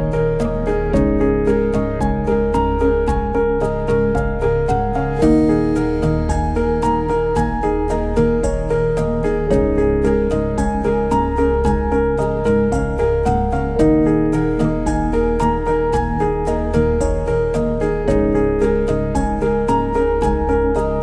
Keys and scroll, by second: 12.9 v, 14.7 b.